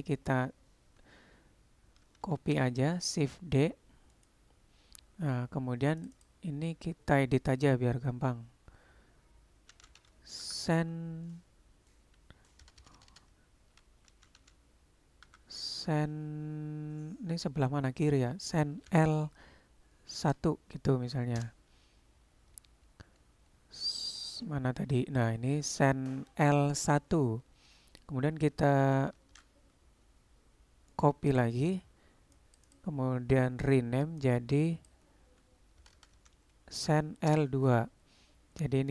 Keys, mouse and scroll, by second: 2.4 shift+d, 6.0 click, 6.2-22.5 drag, 12.8 BackSpace, 13.0 BackSpace, 29.3 shift+d, 32.4 click, 32.7-38.4 drag, 36.0 BackSpace.